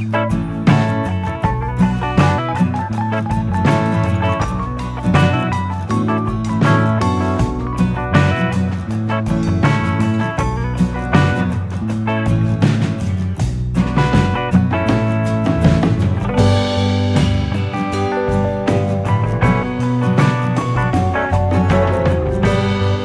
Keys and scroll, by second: 0.0 u, 3.4 ctrl+=, 8.8 0, 9.0 Return, 12.4 F9, 17.3 ctrl+-.